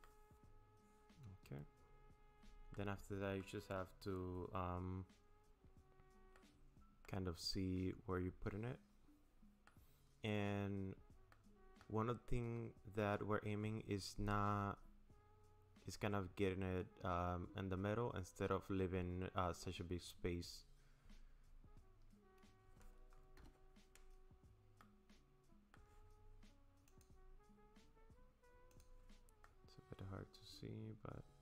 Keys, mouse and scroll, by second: 0.0 middle click, 3.4 middle click, 6.6 scroll up 2, 7.0 middle click, 10.0-10.6 scroll up 5, 11.3 middle click, 22.0 scroll down 1, 23.4 KP_0, 24.8 middle click, 26.9 click, 28.7 click, 29.4 middle click.